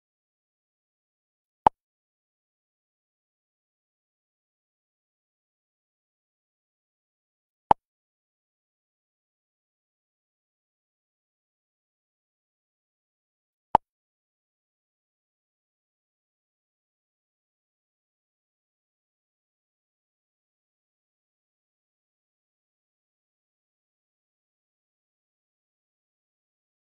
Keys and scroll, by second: 18.5 Up.